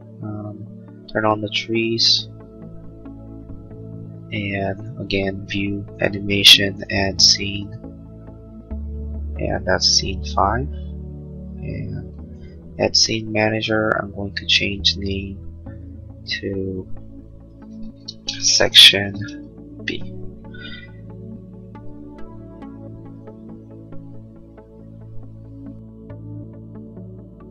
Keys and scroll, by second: 19.8 Return.